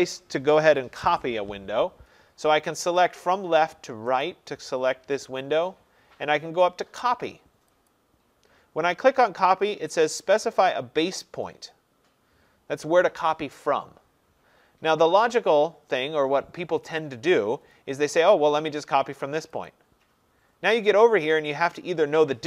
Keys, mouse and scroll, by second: 3.2 click, 4.3 click, 7.9 click, 19.8 click.